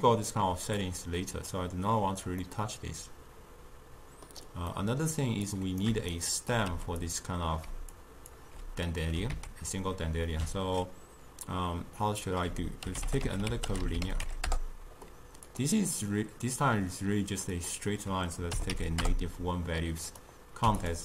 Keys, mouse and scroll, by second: 0.9 click, 2.5-5.5 middle drag, 5.5 click, 6.2 shift+right click, 6.7 g, 7.8 d, 8.1 click, 8.4 d, 9.4 ctrl+a, 17.6-21.0 drag.